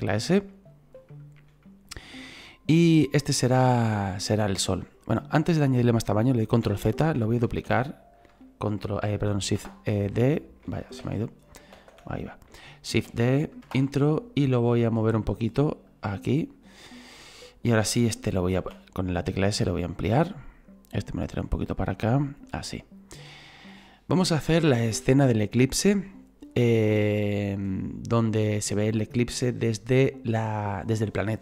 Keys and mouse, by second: 0.0 shift+middle click, 1.1 shift+middle click, 9.6 Return, 10.4 click, 13.6 Return, 14.7 click, 17.5 right click, 20.0 click, 20.5 right click, 21.1 click, 22.0 shift+middle click.